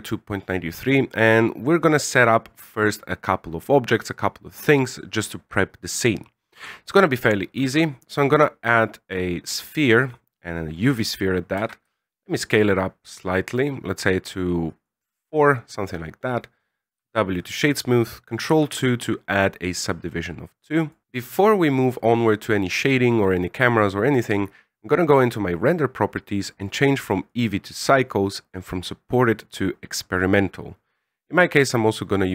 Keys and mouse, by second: 7.5 shift+a, 11.6 s, 16.9 w, 18.5 ctrl+2, 20.8 click, 24.9 click.